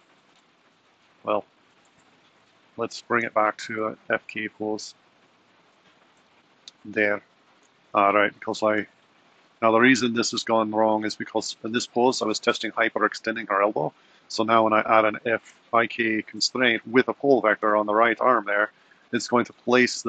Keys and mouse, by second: 0.9 Left, 1.3 Right, 2.1 super+z, 2.4 super+z, 3.0 super+z, 3.2 super+z, 3.8 super+z, 4.0 super+z, 4.3 super+z, 4.6 super+z, 5.1 super+z, 14.6 click, 17.6-18.8 drag.